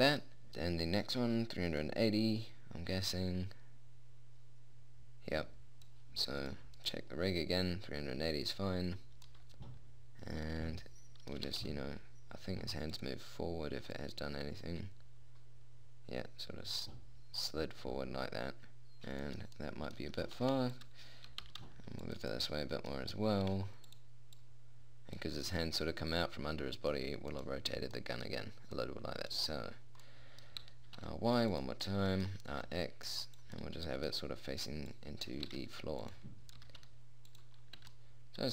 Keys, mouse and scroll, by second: 0.5 middle click, 1.3-5.3 drag, 6.9-9.7 right drag, 9.7-11.1 middle drag, 11.9 g, 14.4-16.3 middle drag, 19.1 middle click, 20.3 middle click, 20.5 g, 21.7 g, 21.9 middle click, 23.9 r, 24.8-26.1 drag, 28.5 middle click, 31.1 r, 32.9 r, 33.5 middle click, 35.9 r, 37.0 g, 38.3 a.